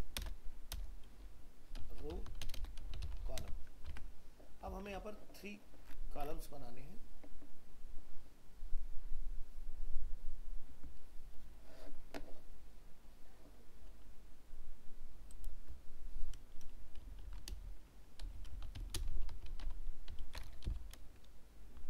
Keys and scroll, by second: 3.9 alt+Tab.